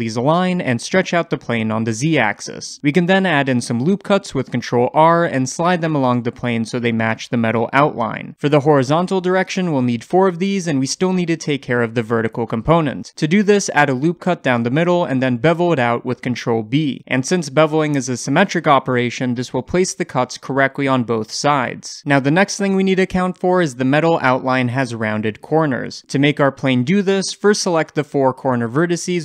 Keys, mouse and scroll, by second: 0.7-3.4 shift+middle drag, 3.4-3.9 scroll up 1, 3.9-8.2 shift+middle drag, 8.2 shift+click, 8.6-10.0 shift+middle drag, 11.2-13.5 shift+middle drag, 15.4 ctrl+b, 26.4 shift+middle click, 27.2 click, 28.2-29.2 shift+middle drag.